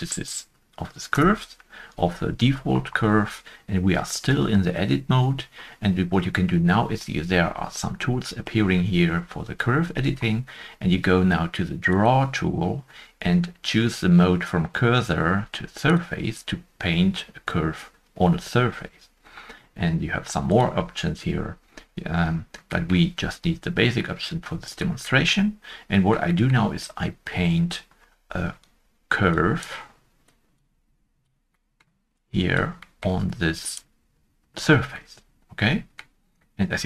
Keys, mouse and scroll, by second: 0.6 Delete, 1.1 Return, 22.2 Return, 22.4 scroll up 1, 23.9 shift+Tab, 23.9 middle click, 24.0 middle click, 24.0 scroll up 1, 25.0 middle click, 25.0 shift+middle click, 25.4-25.8 scroll up 1, 26.2-27.3 scroll up 2, 27.3 shift+middle click, 31.5 shift+middle click, 31.5-32.6 scroll up 1, 32.6 middle click, 32.8 shift+middle click, 36.6 middle click, 36.6 Tab.